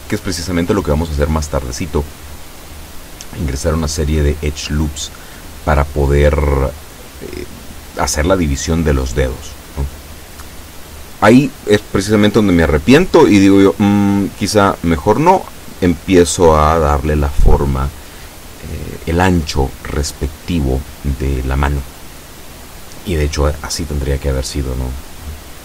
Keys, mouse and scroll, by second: 13.1 s, 13.8 x, 19.4-21.0 drag.